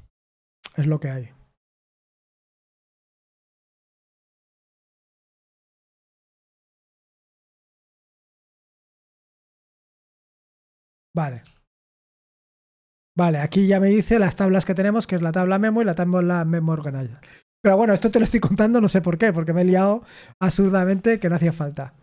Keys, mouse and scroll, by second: 3.7 Return, 11.7 ctrl+p, 12.2 Return, 21.3-22.0 typing.